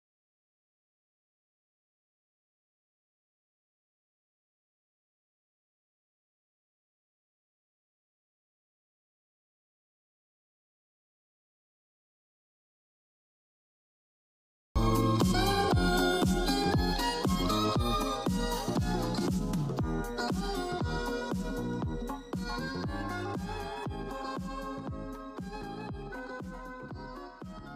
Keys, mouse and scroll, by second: 4.7 click, 4.7-5.6 drag, 7.6-8.3 drag, 10.0 click, 12.7 click, 15.4 click, 15.4 click, 16.8 ctrl+z, 18.5 click, 25.9 ctrl+z, 27.0 ctrl+z.